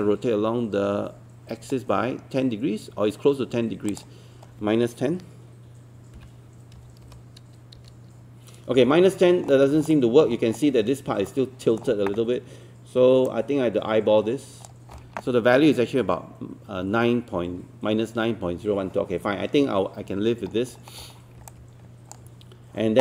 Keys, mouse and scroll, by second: 6.8 KP_1, 9.2 scroll up 1, 9.9 alt+middle click, 11.3 alt+middle click, 13.3-15.1 drag, 20.5 scroll down 1, 21.5 click.